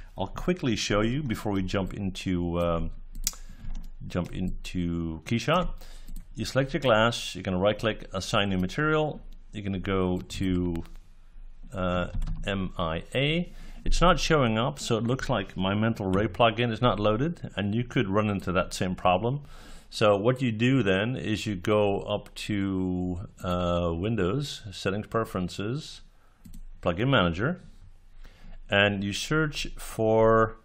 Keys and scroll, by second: 16.0 Delete.